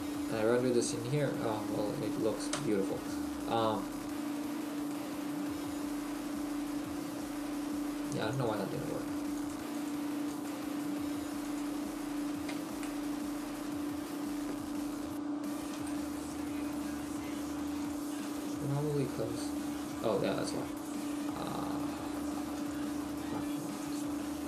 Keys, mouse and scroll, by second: 2.6 Escape, 4.2 right click, 4.9 middle click, 7.1 right click, 9.4 click, 10.3 click, 16.2 Escape, 16.2 right click.